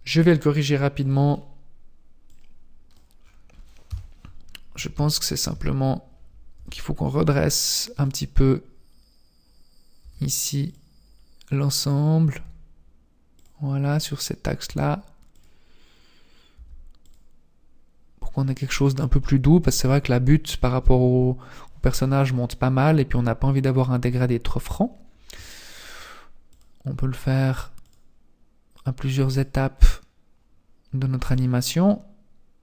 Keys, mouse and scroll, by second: 2.3 click, 3.2-3.9 scroll down 4, 3.9 KP_3, 4.5-4.8 scroll down 1, 5.1 shift+middle click, 5.7-6.5 scroll up 4, 6.5 r, 8.7-9.1 scroll up 2, 9.7 scroll up 1, 10.1 r, 12.2 r, 14.5 r, 16.4 r, 19.1-19.7 scroll down 3, 20.4-21.4 scroll up 2, 26.5 click, 27.8 click, 29.2 click, 31.4 click.